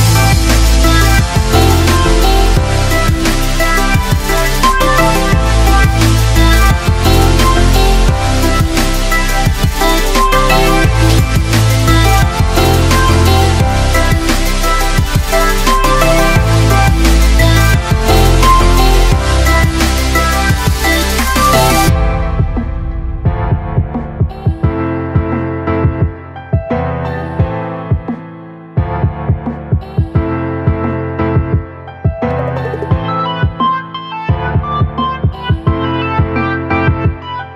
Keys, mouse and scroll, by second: 1.9 Escape, 3.2-6.6 drag, 19.3-28.5 drag.